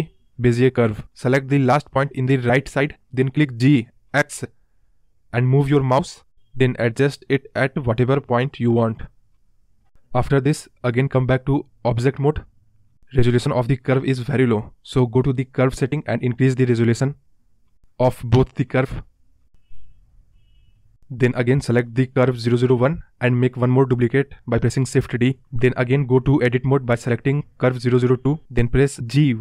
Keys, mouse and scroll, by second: 2.5 g, 6.5 ctrl+click, 7.1-8.3 scroll up 7, 8.3-9.5 scroll down 6, 10.1 Tab, 11.5 click, 12.6-13.8 drag, 13.9-15.0 drag, 15.3 click, 15.6 click, 16.0 click, 16.7-18.4 drag, 18.4 scroll down 1, 18.6-19.5 scroll up 1, 19.5 click, 23.2 shift+d, 23.8-24.2 scroll down 1, 24.9 Tab, 26.9 g.